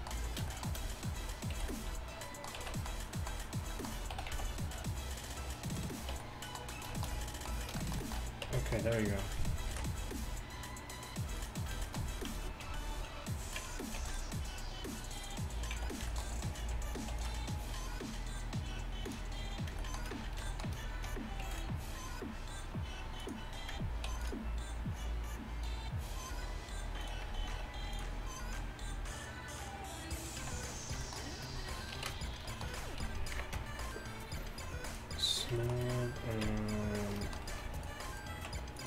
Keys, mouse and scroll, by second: 1.6 b, 2.6 z, 4.2 s, 6.2 Tab, 8.5 Tab, 9.8 ctrl+b, 15.2 ctrl+r, 15.8 z, 17.2 ctrl+r, 21.5 ctrl+r, 24.1 ctrl+r, 27.7 ctrl+r, 30.5 z, 32.0 ctrl+2, 33.4 KP_1, 33.6 Tab, 33.6 z, 35.7 click, 35.9 middle click, 35.9 right click, 36.5 Tab, 38.8 click, 38.8 middle click, 38.8 right click.